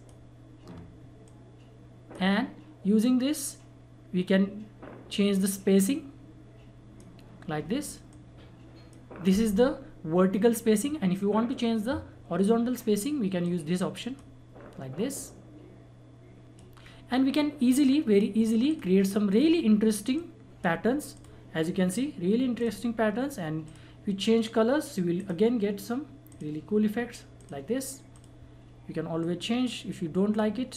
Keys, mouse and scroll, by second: 13.4-30.7 drag.